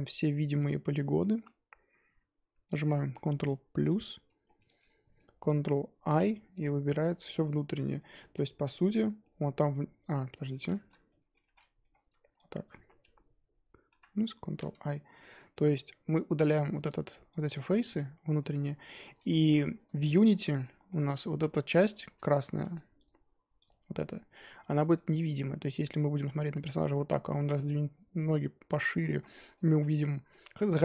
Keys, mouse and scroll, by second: 0.5 shift+click, 1.4-3.9 middle drag, 3.9 ctrl+KP_Add, 4.8-6.1 middle drag, 6.1 ctrl+i, 7.0 z, 7.4-8.3 middle drag, 8.3 z, 9.7-10.3 middle drag, 10.3 ctrl+z, 10.7-11.4 shift+middle drag, 11.4 ctrl+z, 11.6-11.9 middle drag, 11.9-12.4 scroll up 2, 12.8 shift+click, 13.9 ctrl+KP_Add, 14.5 ctrl+i, 15.5-17.3 middle drag, 17.3 x, 17.9-18.5 middle drag, 18.5-18.9 scroll down 10, 18.9-19.4 middle drag, 19.4 Tab, 19.7-20.1 scroll up 2, 20.1-20.7 shift+middle drag, 20.7 scroll up 3, 20.9-21.2 middle drag, 21.5 scroll up 2, 21.7 Tab, 22.6 Tab, 23.6 click, 24.3-24.8 scroll down 7, 24.9-28.8 middle drag, 28.8 scroll up 2, 29.0-29.9 middle drag, 29.9-30.3 scroll up 2, 30.3-30.8 middle drag.